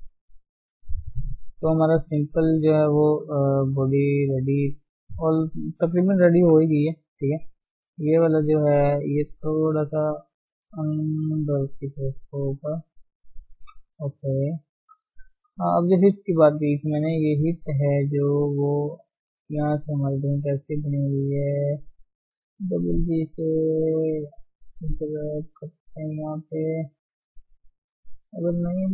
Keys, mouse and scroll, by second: 0.1 scroll down 2, 0.4-3.0 shift+middle drag, 3.0-3.5 scroll up 2, 3.2 shift+middle click, 3.5 middle click, 3.7 Tab, 4.2 middle click, 4.5 scroll up 1, 4.7 shift+scroll down 1, 4.7 shift+middle click, 5.4-6.0 scroll up 1, 6.4 KP_3, 6.7-7.3 scroll up 2, 7.3 shift+z, 7.5 shift+middle click, 7.8-9.0 scroll up 1, 9.0 click, 10.6 g, 12.0 click, 12.2 g, 13.2-13.8 scroll down 6, 13.8 scroll up 1, 14.0-15.2 shift+middle drag, 15.2 shift+z, 15.4 shift+middle click, 15.6-16.4 scroll up 3, 15.8 Tab, 16.4 shift+middle click, 16.8 shift+z, 17.7 click, 17.9 shift+z, 18.1-20.6 middle drag, 20.6 click, 20.9-22.4 middle drag, 22.4 g, 24.4 g, 26.2-27.6 middle drag, 27.6 ctrl+z, 28.0 ctrl+z, 28.7-28.9 middle drag.